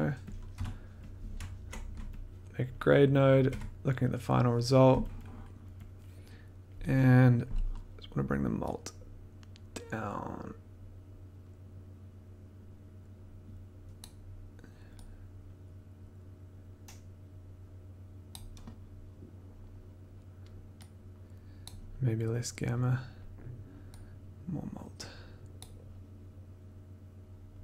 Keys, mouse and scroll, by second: 0.3 click, 0.5 g, 1.5 ctrl+click, 2.6 click, 3.5 click, 3.5 1, 5.1 click, 5.2 click, 5.2 click, 5.8 click, 13.9 click, 18.2 click, 21.6 click, 25.5 click.